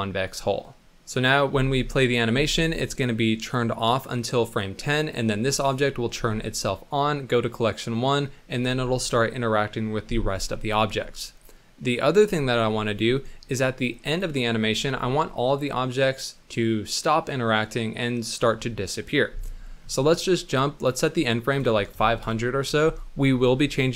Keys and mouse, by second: 1.5 space, 2.6 space, 3.0 click, 6.1 Right, 13.1-14.2 drag, 20.5 click, 20.9-22.2 drag, 21.9 KP_0, 23.8 middle click.